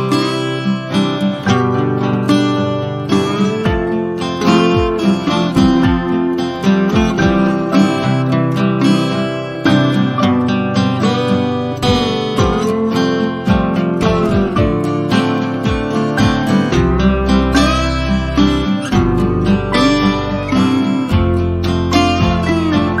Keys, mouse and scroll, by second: 7.3 F1, 7.8 click, 8.2 ctrl+c, 8.4 click, 8.8 ctrl+shift+v, 9.2 F1, 10.1-11.4 drag, 12.0-12.9 click, 13.0 z, 13.2 click, 13.5 F1, 14.6-15.3 drag, 18.4-19.7 ctrl+scroll down 2, 19.7 z, 20.0 click, 20.2 F1, 21.7-23.0 drag.